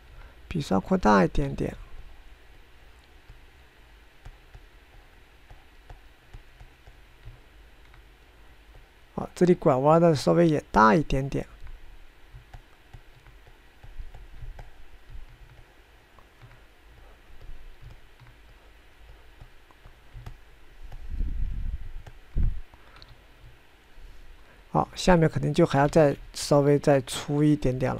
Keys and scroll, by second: 1.1 f, 2.5 ctrl+z, 24.1 1, 27.0 ctrl+z.